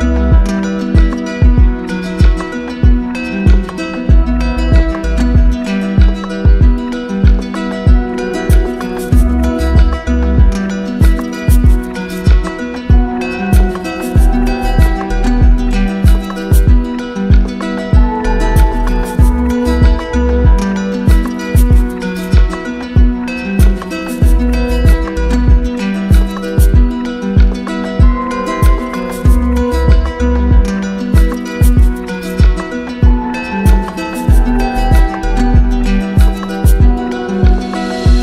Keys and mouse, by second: 6.9 z, 8.5 q, 10.9-11.9 alt+drag, 12.2-13.3 drag, 21.5-22.6 drag, 24.5-25.6 drag, 28.7-29.7 drag, 30.9-32.0 drag, 33.3-34.4 drag.